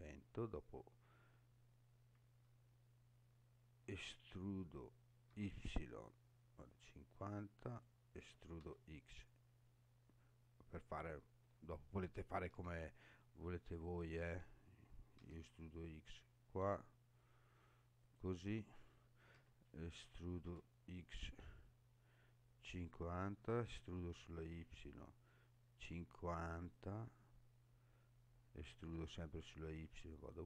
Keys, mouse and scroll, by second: 3.9 e, 5.3 y, 7.7 click, 8.2 e, 8.6 x, 10.9 click, 12.5 e, 15.2 x, 18.0 click, 19.3 e, 20.4 x, 22.7 click, 23.4 e, 24.0 y, 26.7 click, 28.6 e, 28.9 y.